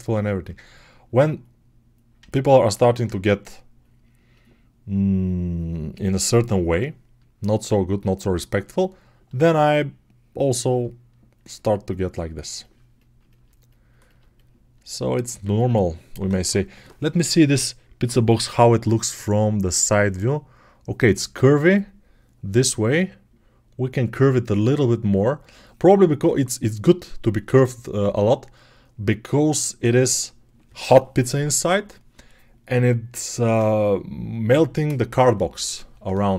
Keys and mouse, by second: 20.0-28.0 right drag, 28.0-32.0 drag, 32.0-36.3 right drag.